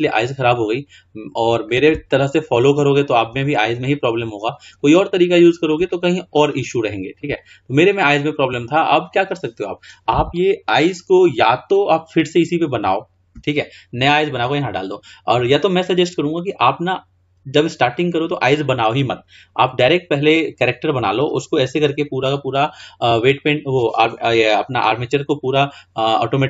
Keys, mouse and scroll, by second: 0.6-2.2 scroll down 7, 2.2-5.0 shift+middle drag, 5.0-6.0 scroll up 5, 6.0-9.5 shift+middle drag, 9.5-12.8 scroll down 2, 20.0-21.8 scroll down 4, 21.8-22.7 scroll down 6, 22.7-26.1 scroll up 8.